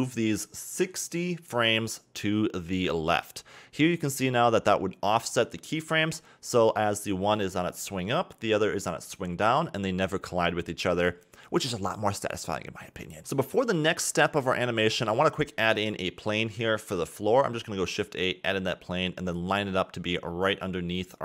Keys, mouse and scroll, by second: 4.4-7.4 drag, 8.2-10.7 middle drag, 8.2-8.7 scroll up 3, 10.7-13.7 drag, 13.7-14.6 scroll up 2, 14.8 shift+a, 16.9-17.5 scroll down 2, 17.5 s, 17.5 s, 17.9-18.3 scroll down 2, 18.3-20.2 middle drag, 20.2-20.8 scroll up 6, 20.8 g.